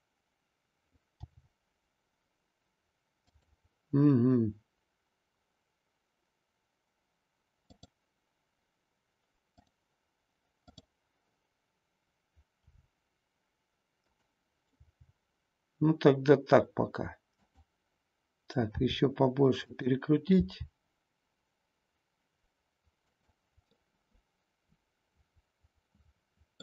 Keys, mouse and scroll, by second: 3.3 click, 3.3 g, 7.7 click, 9.5 click, 10.7 click, 12.6 r, 14.0 click, 14.6 g, 17.4 click, 18.8 r, 19.8 click, 20.3 g, 23.2 click, 23.7-26.6 middle drag.